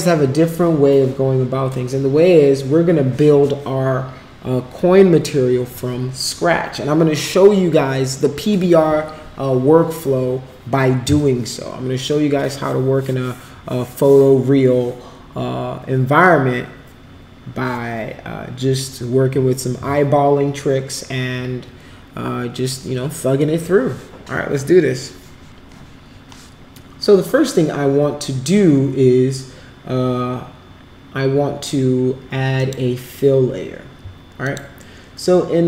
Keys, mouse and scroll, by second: 32.5 click, 34.4 click.